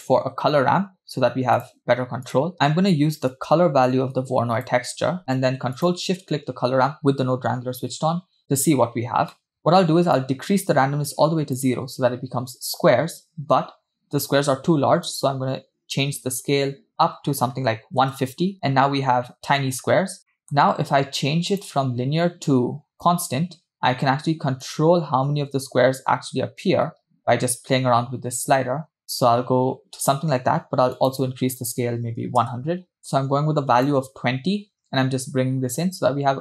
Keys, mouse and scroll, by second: 3.3 click, 6.1 ctrl+shift+click, 9.3 middle click, 9.6-10.1 scroll up 2, 10.2-11.8 drag, 15.1-18.3 drag, 18.8-19.6 scroll up 3, 20.3 middle click, 21.5-23.5 drag, 25.0 click, 31.0-32.6 drag, 32.2 0, 33.0 click.